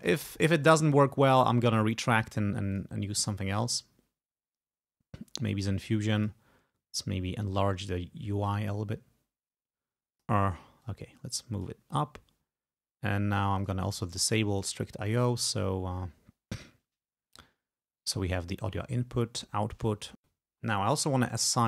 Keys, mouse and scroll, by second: 0.4-1.8 drag, 2.8 click, 6.3 click, 7.6-10.5 drag, 10.9-11.9 drag, 13.7 click, 14.6 click, 21.3 click.